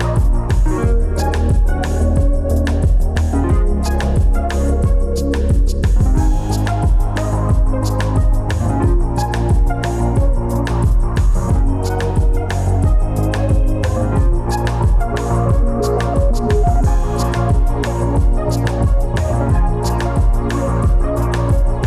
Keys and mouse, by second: 0.8 click, 2.0 click, 2.5 click, 4.8 click, 5.5 click, 7.3 Tab, 7.9 Tab, 19.6 click, 20.2 click, 21.2 click.